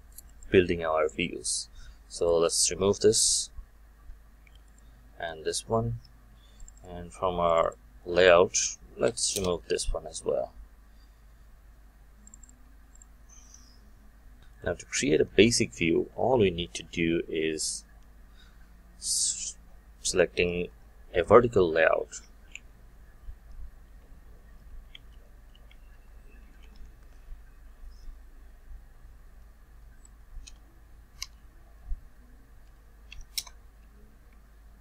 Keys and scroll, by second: 3.8 ctrl+y.